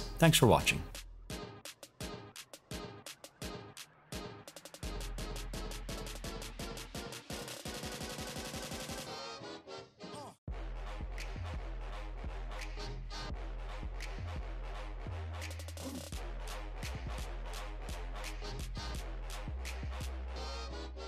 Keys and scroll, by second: 1.4 Down.